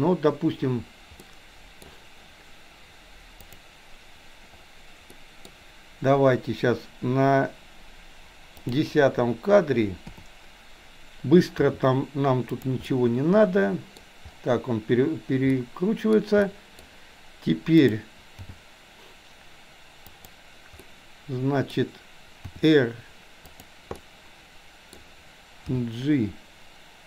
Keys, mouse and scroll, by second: 1.2 middle click, 1.7 middle click, 3.4 click, 5.1-5.6 middle drag, 8.6 click, 10.1 KP_7, 11.7 r, 12.9-14.0 middle drag, 15.5-16.1 middle drag, 16.5-16.9 middle drag, 17.9 click, 18.5 g, 20.9-21.5 scroll up 1, 21.5 middle click, 22.6 r, 24.0-25.0 middle drag, 25.7 g.